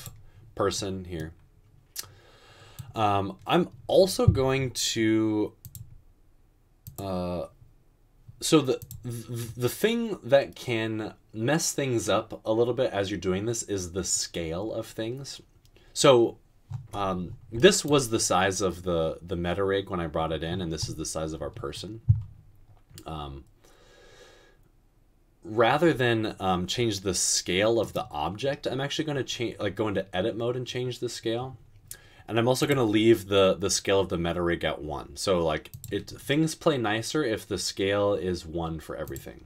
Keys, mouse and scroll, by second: 26.7 s.